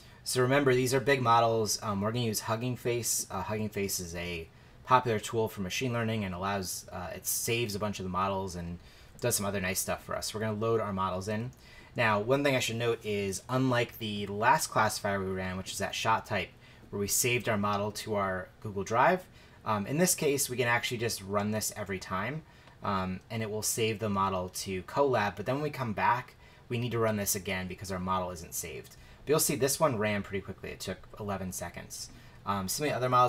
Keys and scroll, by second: 11.1 shift+Return.